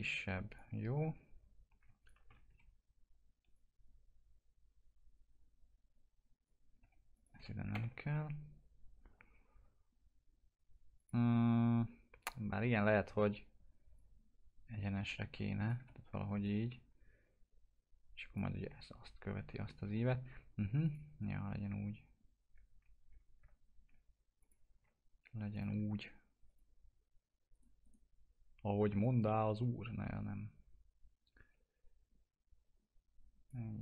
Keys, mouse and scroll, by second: 0.4 click, 1.9 ctrl+click, 2.4 e, 3.5-6.7 drag, 6.7 2, 7.1 click, 7.7 ctrl+BackSpace, 10.9 click, 13.9-15.7 drag, 15.7 w, 16.4-20.8 drag, 24.4 click, 27.5 right click.